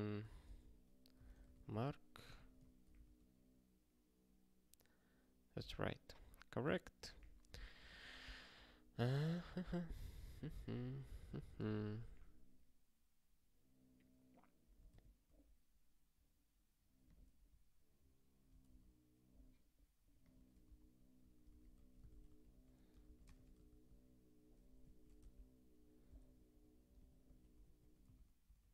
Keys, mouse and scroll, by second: 0.0-1.9 typing, 2.2 ctrl+g, 2.5 ctrl+s, 3.0 ctrl+k, 6.9 click, 7.5 ctrl+alt+@, 8.5 ctrl+n, 8.9 ctrl+p, 9.2 ctrl+e, 9.5 Return, 9.6 ctrl+p, 10.4 ctrl+n, 10.5 ctrl+y, 11.1 ctrl+n, 11.3 ctrl+a, 11.8 ctrl+alt+@, 14.8 ctrl+g, 17.0 click, 18.7 alt+d, 20.2 click, 20.5 ctrl+b, 21.1 ctrl+n, 21.5 ctrl+alt+k, 22.0 Return, 22.3 ctrl+y, 23.0 ctrl+b, 23.3 alt+shift+s, 23.6 ctrl+p, 24.8 ctrl+=, 25.2 Tab, 26.9 click, 27.4 ctrl+p, 27.6 ctrl+=, 28.0 ctrl+w, 28.5 ctrl+a.